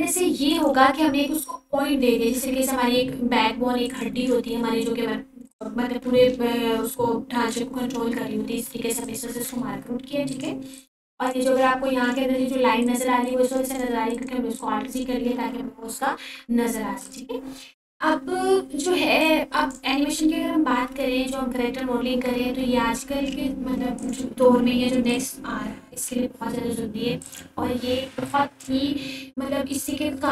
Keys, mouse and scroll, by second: 0.2-2.0 typing, 1.7 click, 3.1-6.1 typing, 5.0 click, 6.7 click, 7.5 alt+z, 8.6-11.2 typing, 10.2 click, 11.4 click, 13.0 ctrl+a, 14.0 click, 16.0-17.0 typing, 18.2 click, 20.4-21.0 drag, 25.2 right click, 26.3 click, 27.0 ctrl+a, 28.4-30.1 drag.